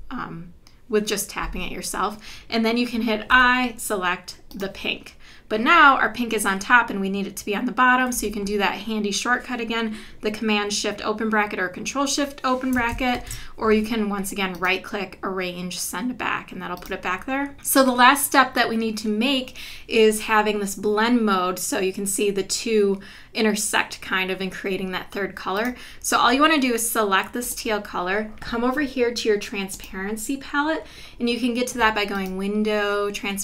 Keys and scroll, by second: 3.3 i, 8.1 v, 13.1 shift+super+[.